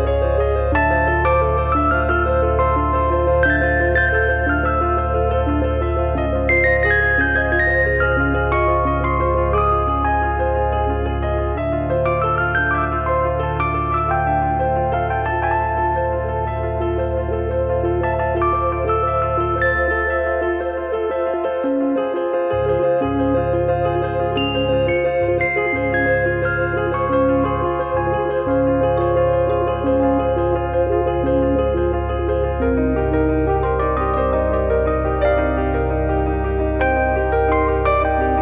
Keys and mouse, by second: 1.6 click, 3.4 click, 4.1 middle click, 4.9 KP_3, 7.8 click, 8.8 click, 9.5 click, 10.6 click, 12.8 click, 13.7 shift+middle click, 14.8 click, 16.2 click, 16.6 middle click, 17.3 click, 18.4 click, 20.8 e, 21.2 click, 22.2 click, 25.3 middle click, 25.5 shift+h, 26.0 click, 27.4 middle click, 27.7 shift+a, 28.2 click, 29.8 middle click, 31.2 shift+r, 32.4 shift+b, 33.0 middle click, 33.3 shift+b, 33.6 click, 34.7 click.